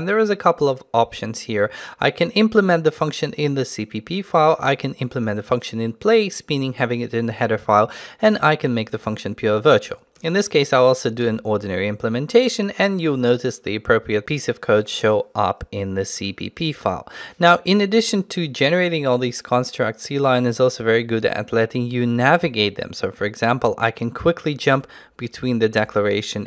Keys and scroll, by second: 24.8 ctrl+b, 25.8 ctrl+b.